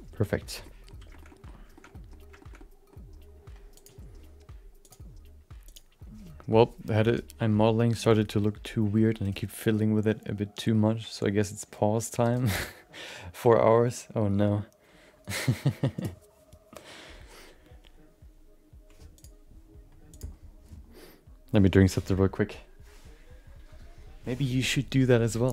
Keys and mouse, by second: 0.0 click, 0.0 f, 0.6 middle click, 1.1 shift+middle click, 1.3 middle click, 1.7 shift+middle click, 1.9 middle click, 2.4 shift+middle click, 2.5 middle click, 3.8 click, 4.9-7.7 drag, 19.3-22.7 drag.